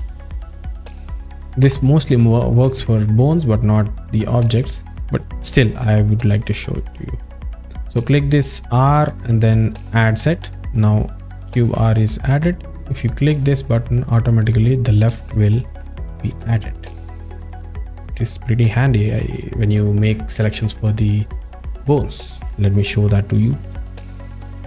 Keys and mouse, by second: 4.6 click, 7.5 click, 10.7 drag, 13.7 click, 14.8 click, 16.3 click, 16.5 click, 16.7 click, 16.9 click, 17.0 click, 17.2 click.